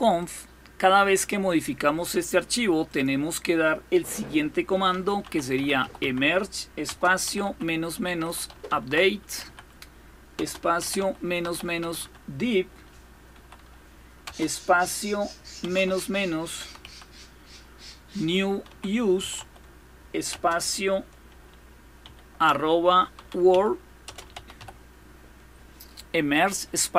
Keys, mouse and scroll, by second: 0.0 click, 2.7 click, 4.6-14.0 typing, 15.4-20.1 typing, 21.8-24.9 typing.